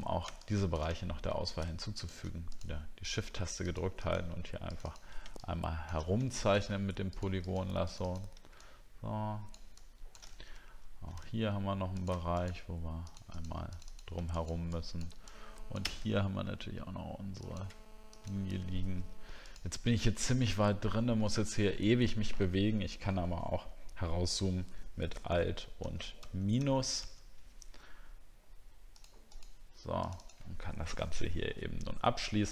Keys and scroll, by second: 0.9-1.7 alt+scroll down 3, 10.4 alt+scroll up 2, 25.3 alt+-, 26.2 -, 27.0 alt+-.